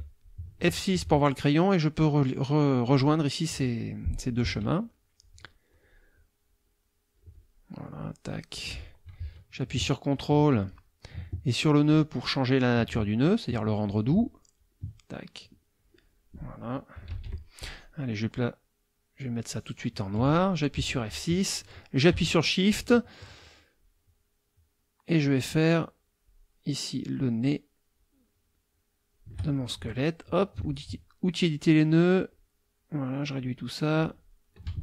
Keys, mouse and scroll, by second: 1.3-3.0 drag, 4.4 F2, 5.2 click, 6.4-7.7 drag, 7.9 click, 11.7 ctrl+click, 13.2 ctrl+click, 14.6 ctrl+click, 15.8 click, 17.1 KP_Subtract, 19.2 click, 20.7 F6, 25.3-26.5 shift+drag, 26.9-27.6 shift+drag, 27.9-29.3 shift+drag, 29.7 shift+F2, 30.7 ctrl+click, 31.4 click, 31.9 click, 32.7 click, 34.0 click, 34.7 ctrl+a.